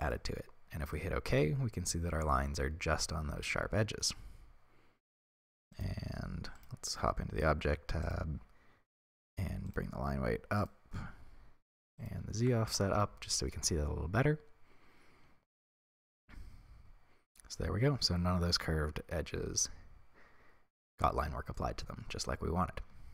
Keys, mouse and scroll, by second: 1.0-9.4 middle drag, 9.4 click, 10.6 click, 11.3-12.7 scroll down 1, 12.7-13.8 drag, 12.8 Return, 13.8-23.1 middle drag.